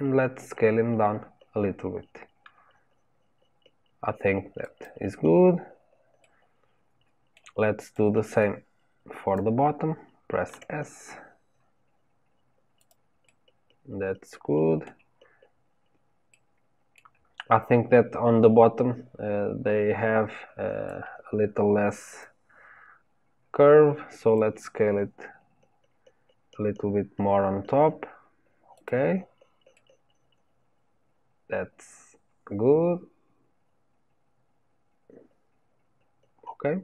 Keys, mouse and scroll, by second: 5.1 scroll down 1, 6.2-7.9 middle drag, 7.9 click, 10.4 s, 13.2-19.3 middle drag, 20.8-23.8 drag, 29.7-32.7 middle drag.